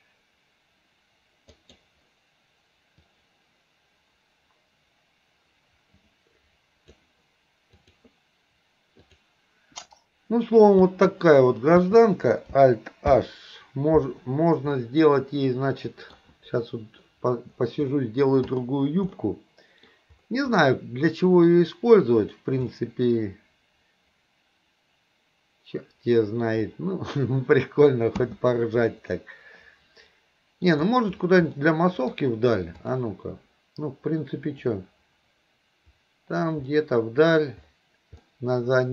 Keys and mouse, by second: 10.9 space, 11.8 space, 13.1 alt+h, 14.8-16.2 middle drag, 18.0-18.3 middle drag, 18.5 click, 19.2-19.9 middle drag, 20.6-21.5 middle drag, 22.3 click, 22.8-26.5 middle drag, 28.2 space, 29.2-30.8 middle drag, 31.6-32.3 middle drag, 32.9 click, 34.6 click, 36.8-37.6 middle drag, 38.3-38.9 middle drag.